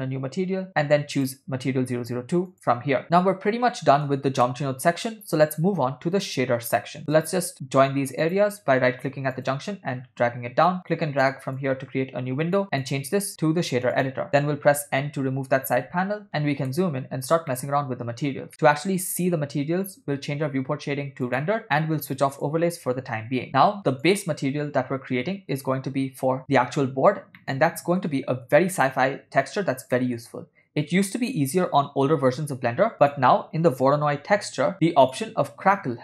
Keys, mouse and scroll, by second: 1.2-2.6 drag, 3.0-4.1 middle drag, 4.6-5.3 shift+middle drag, 7.2-8.3 right drag, 8.3-9.6 drag, 11.6-12.6 drag, 12.8-14.2 drag, 15.1 n, 16.3 middle click, 16.7 ctrl+middle click, 17.5 middle click, 18.5 middle click, 21.6 click, 22.4 click, 24.1 click, 27.4 middle click, 30.0 middle click, 33.0 shift+a.